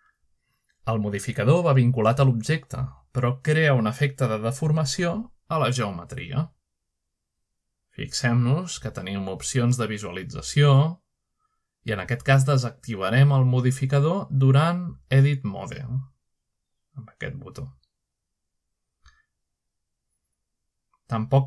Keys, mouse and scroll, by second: 0.0 click, 1.8-2.7 middle drag, 3.5-4.0 shift+middle drag, 5.3-6.6 middle drag, 10.5 click, 11.3 click, 11.9 click, 12.6 click, 13.2 click, 16.7 click, 18.5 click, 18.9 click.